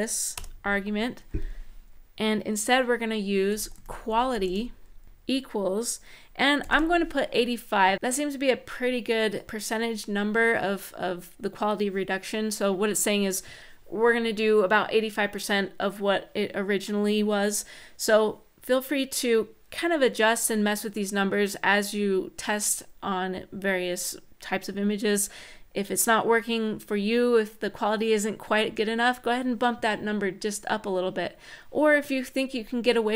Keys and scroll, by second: 0.1 BackSpace, 3.0-4.9 typing, 6.1-6.9 typing.